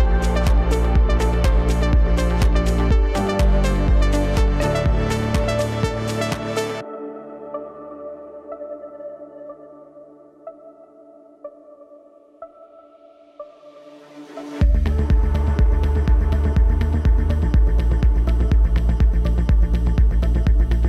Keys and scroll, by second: 12.0 ctrl+t.